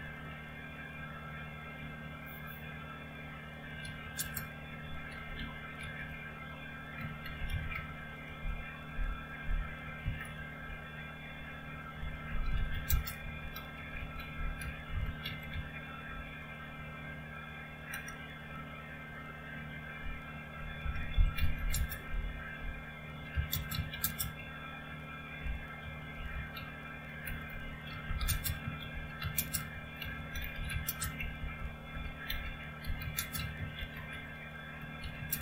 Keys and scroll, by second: 0.0-0.4 typing, 3.8 typing, 4.9-8.0 typing, 8.2 Return, 9.6-10.7 typing, 12.0-16.0 typing, 17.9 typing, 20.8-35.4 typing.